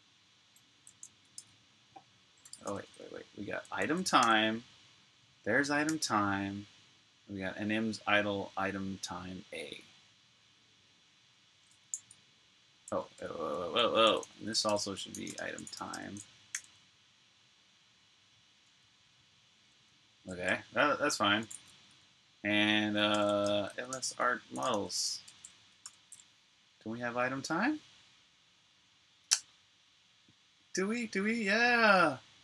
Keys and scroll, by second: 1.1-3.6 typing, 4.0 super+j, 5.7 j, 11.7 typing, 12.7-16.4 typing, 16.4 super+j, 20.3 Escape, 21.3 typing, 22.7-25.6 typing, 25.7 Return, 27.6 typing, 31.5-31.9 Up.